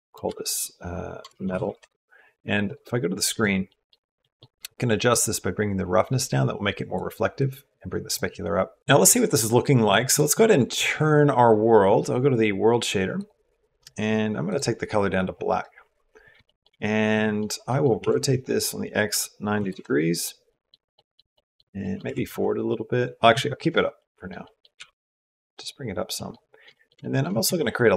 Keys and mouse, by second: 2.4 click, 3.0 click, 3.5 click, 4.1 click, 4.9-6.8 drag, 7.2 click, 8.6 click, 16.2 shift+middle click, 16.9 middle click, 17.5 middle click, 17.8 r, 20.3 click, 20.5 middle click, 20.7 click, 21.1 click, 21.6 click, 21.7 middle click, 22.1 r, 23.4 middle click, 23.8 middle click, 24.2 middle click, 24.6 g, 26.0 click, 26.5 shift+middle click, 27.2 shift+a.